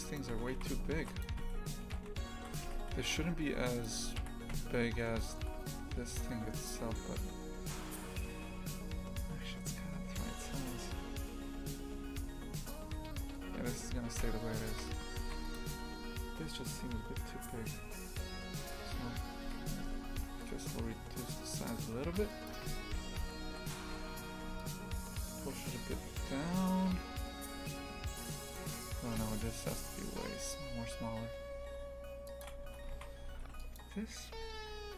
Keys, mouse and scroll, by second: 0.0 right click, 0.3 Tab, 0.5 shift+f, 1.3 a, 1.8 s, 3.0 shift+f, 4.2 KP_3, 4.5 Tab, 4.8 scroll down 1, 5.2-6.1 shift+middle drag, 6.1 g, 14.7 shift+f, 16.5-18.6 right drag, 18.6 Tab, 19.4 s, 22.6 Tab, 23.0 shift+f, 25.1 g, 29.0 Tab, 29.7 s, 32.6 Tab, 32.9 shift+f.